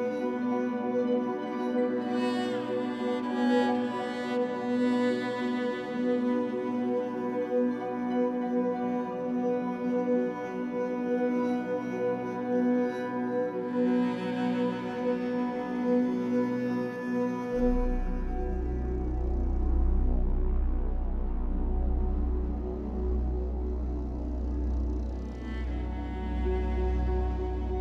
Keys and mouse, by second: 3.1 3, 3.5 click, 4.6-5.7 drag, 6.8 shift+click, 6.8 typing, 7.7-8.8 drag, 8.9 click, 10.3 p, 11.4 Down, 11.7 Return, 13.1 click, 14.4 click, 15.3 click, 15.8 click, 16.6-18.3 drag, 16.7 typing, 18.4-19.1 typing, 19.6 Return, 21.3 click, 21.6 click, 23.6 KP_Divide, 24.6 alt+click, 27.0 alt+click.